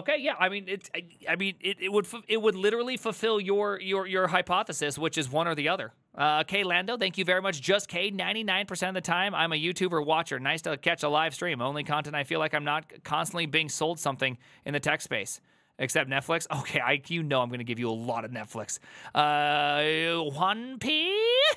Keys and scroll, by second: 7.6 alt+f.